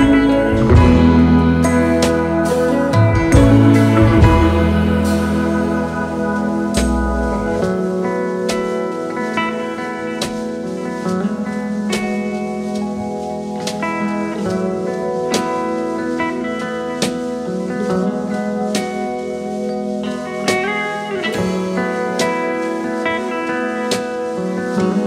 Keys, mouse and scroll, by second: 0.5 alt+scroll down 1, 0.5 alt+scroll up 2, 1.3 double click, 1.4-1.7 space, 2.6 space, 4.3 shift+click, 5.0 alt+click, 6.2 double click, 7.1 alt+scroll down 2, 7.8-8.1 alt+scroll up 2, 9.8 shift+click, 10.9 alt+scroll down 3, 11.2-12.4 space, 13.3 shift+click, 13.7 alt+click, 15.0 double click, 15.4 alt+scroll down 2, 16.5 alt+scroll up 1, 18.1 space, 19.2 alt+scroll up 2, 20.4-21.6 alt+scroll up 1, 21.6 Delete, 21.8 alt+scroll down 1, 22.5 space, 23.3 alt+scroll down 1, 23.5 space.